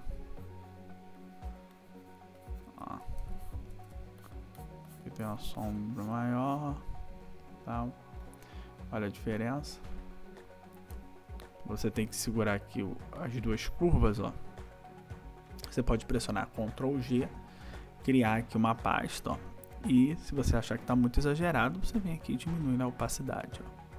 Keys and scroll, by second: 2.8 \, 16.9 ctrl+g.